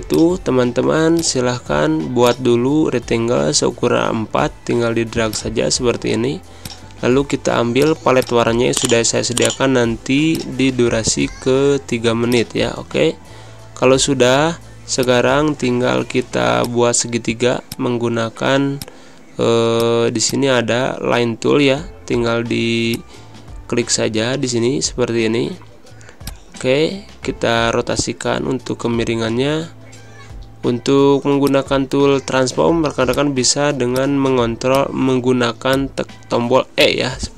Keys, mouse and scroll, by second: 0.0 click, 0.1 space, 1.1-12.4 drag, 13.4 Pause, 14.6 \, 15.1 click, 15.2-16.8 drag, 17.8 space, 18.0 click, 18.2 space, 19.0 click, 19.8 z, 20.0 click, 20.4 space, 20.4 click, 20.8 space, 21.6 e, 23.2-26.6 drag, 27.0-29.6 drag, 30.3 ctrl+z, 31.9 click.